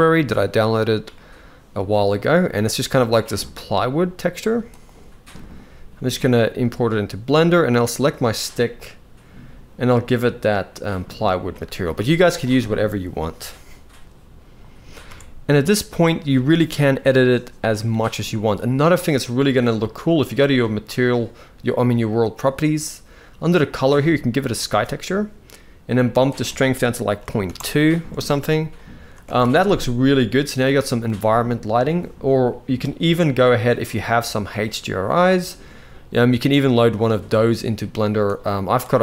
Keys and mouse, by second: 7.3 click, 8.4 click, 11.5 z, 13.7 z, 14.8 alt+a, 17.6-17.9 shift+middle drag, 21.8 click, 23.1-24.3 drag, 26.0-27.2 drag, 28.9 alt+a, 33.0-34.4 drag, 35.1 click.